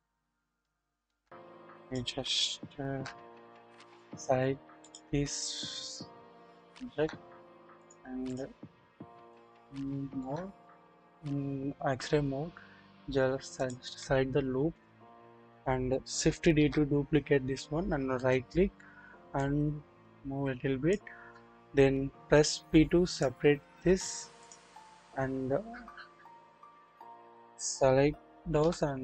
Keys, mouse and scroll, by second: 0.6-1.2 shift+middle drag, 1.2-1.5 shift+scroll up 1, 1.8 click, 1.8 scroll up 1, 3.8 shift+click, 4.8 shift+click, 6.0-6.3 scroll up 1, 6.6-6.9 shift+middle drag, 7.9 double click, 9.0 scroll up 1, 9.1 alt+z, 9.8-10.3 shift+middle drag, 13.6 alt+click, 15.2 scroll down 1, 16.5 d, 18.1 right click, 19.4-20.9 drag, 22.5 p, 23.6-24.4 scroll down 1, 24.4-25.0 drag, 26.9 click, 28.6 s.